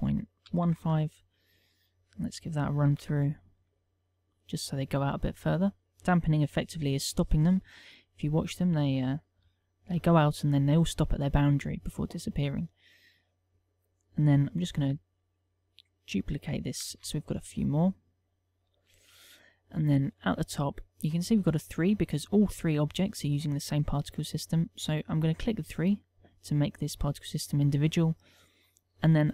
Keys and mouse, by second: 2.7 click, 3.7 alt+a, 6.0 click, 9.1 click, 10.6 alt+a, 13.0 click, 13.5 click, 13.8 click, 15.5 shift+d, 17.3 click, 17.6 shift+d, 18.2 click, 19.3 click, 20.0 middle click, 20.5 middle click, 21.3 middle click, 26.1 click.